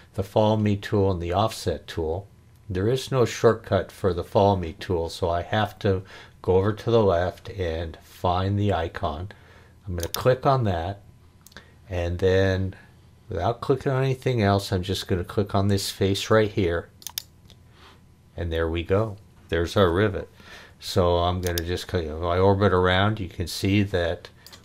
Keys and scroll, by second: 20.7 o.